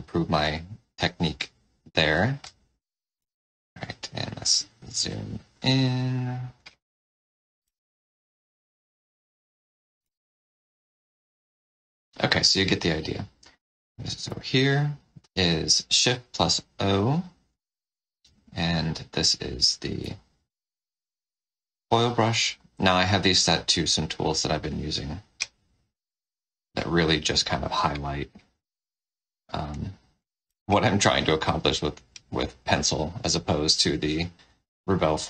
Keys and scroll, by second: 3.1 z, 7.6 space, 10.0 z, 14.1 shift+o, 18.1 ctrl+z, 20.0 F8, 30.4 space.